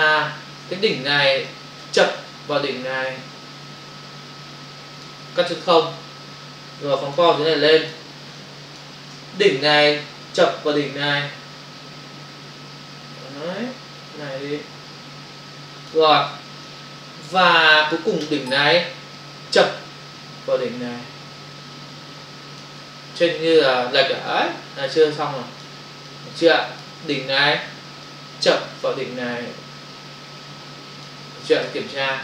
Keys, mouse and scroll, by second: 1.5 click, 5.7 ctrl+o, 6.9 ctrl+click, 7.2 click, 8.3 ctrl+click, 9.8 click, 16.2 space, 19.1 click, 23.2 ctrl+o, 24.7 space, 25.0 ctrl+click, 25.7 space, 28.0 click, 31.7 ctrl+o.